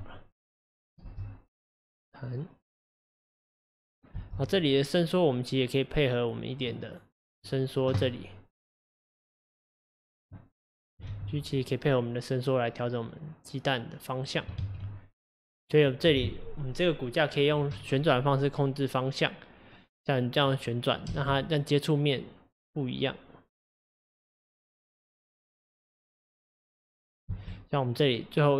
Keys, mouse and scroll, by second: 0.6 x, 1.0 space, 4.2 space, 4.6 click, 8.7 click, 11.1 g, 14.6 ctrl+z, 21.1 space, 24.9 scroll down 2, 25.6-27.3 scroll down 1, 27.4 space, 28.0 click.